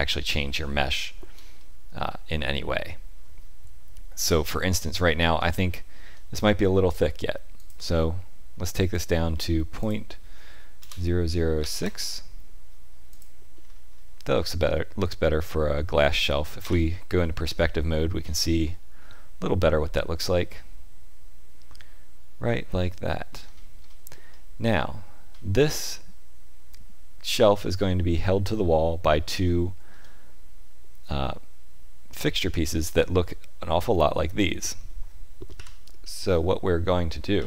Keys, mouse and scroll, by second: 1.0 shift+middle click, 1.5 middle click, 4.2-4.5 scroll up 2, 4.6 shift+middle click, 5.3-5.6 scroll up 2, 5.7 shift+middle click, 7.5 click, 8.9 click, 13.5-14.3 scroll down 5, 14.3 middle click, 16.5 KP_5, 17.4 shift+middle click, 18.4 middle click, 23.2-24.4 scroll down 6, 24.2 middle click, 29.4 shift+middle click, 32.7 click, 35.5 KP_1, 37.3 KP_5.